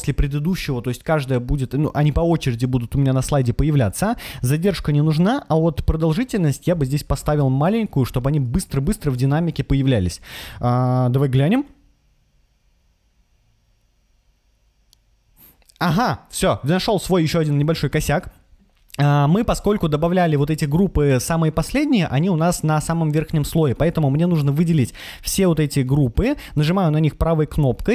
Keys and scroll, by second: 6.6 0, 7.1 shift+6, 8.2 3, 9.1 Return.